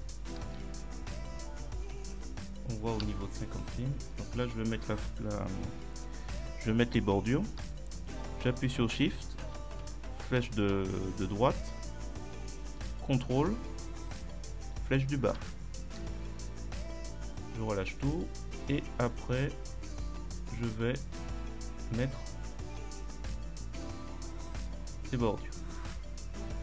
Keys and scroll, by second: 0.5 ctrl+Down, 1.8 Left, 2.2 Right, 3.1 ctrl+Up, 9.5 shift+Right, 15.3 ctrl+shift+Down.